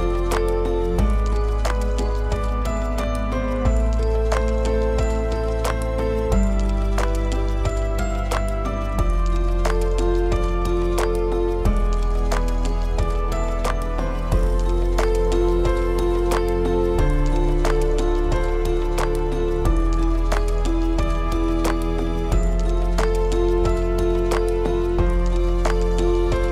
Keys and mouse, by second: 0.3-0.7 drag, 0.8 shift+drag, 1.9 shift+d, 15.9 g, 17.1 click, 17.3-17.9 middle drag, 18.2 click, 19.0 shift+d, 22.5 g, 23.9-24.3 middle drag, 24.7 middle click, 26.4 shift+middle drag.